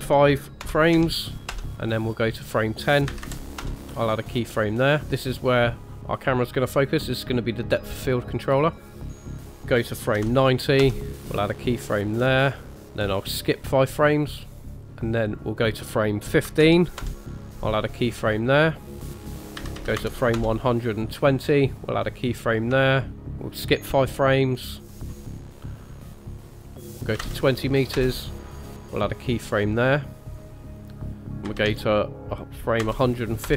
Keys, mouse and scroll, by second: 2.4 click, 4.6 click, 5.1 shift+middle click, 9.3 click, 12.3 click, 14.0 click, 14.3 click, 14.5 click, 14.7 click, 14.8 click, 14.8 shift+middle click, 15.5 click, 18.8 click, 19.4 click, 22.3 click, 22.9 shift+middle click, 24.6 click, 24.8 click, 25.1 click, 25.3 click, 26.1 click, 30.2 click.